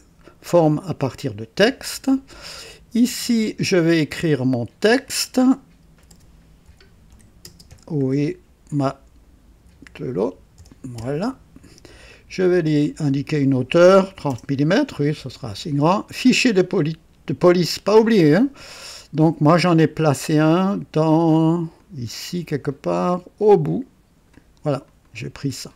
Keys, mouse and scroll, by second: 1.1 click, 4.2 click, 5.8-7.9 typing, 9.3-11.4 typing, 12.8-13.5 drag, 14.0-15.8 typing, 17.2 click, 17.9-20.0 typing, 19.2 click, 21.7 click, 23.6-24.5 drag, 24.1-25.5 typing, 24.8 click.